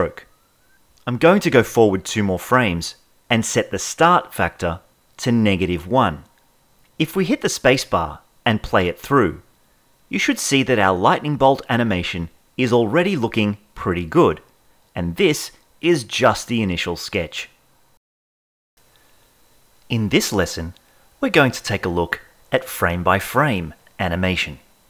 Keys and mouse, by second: 2.1-4.1 drag, 6.8 space, 14.2 Left.